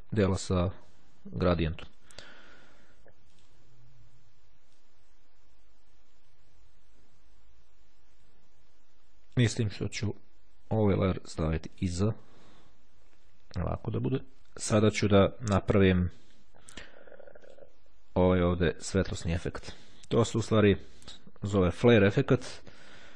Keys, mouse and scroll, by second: 1.3-1.8 ctrl+scroll down 2, 3.5 click, 4.9-9.9 drag, 10.7 click, 11.4 click, 17.6 click, 20.7 click.